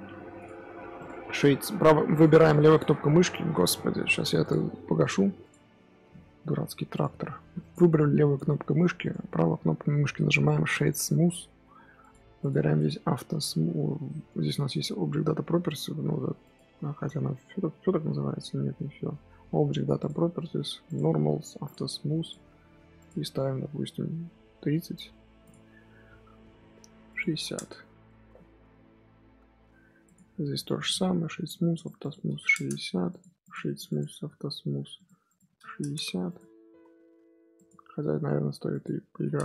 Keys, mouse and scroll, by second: 0.3 click, 0.9-2.0 right drag, 2.0 click, 6.1 middle click, 6.8-7.5 right drag, 7.5 click, 8.9-11.9 right drag, 11.9 click, 12.3 click, 16.3 click, 19.9 click, 20.8-21.6 drag, 22.1 click, 22.9 click, 27.0 click, 28.0-29.2 middle drag, 29.2 z, 29.9 click, 30.5-31.6 right drag, 31.6 click, 31.9-33.1 drag, 33.3 click, 33.5-34.9 right drag, 34.9 click, 35.2-36.3 drag, 37.5 click, 38.6-39.4 drag.